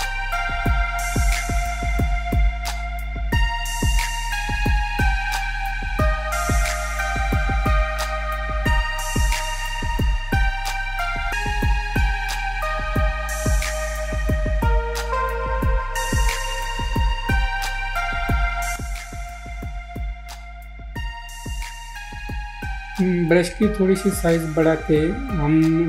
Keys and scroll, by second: 7.3 ctrl+z, 7.7 ctrl+z.